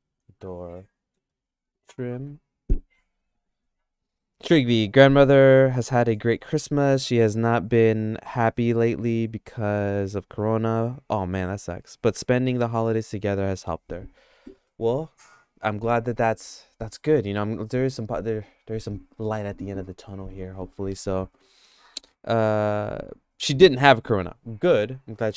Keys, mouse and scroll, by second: 0.2 o.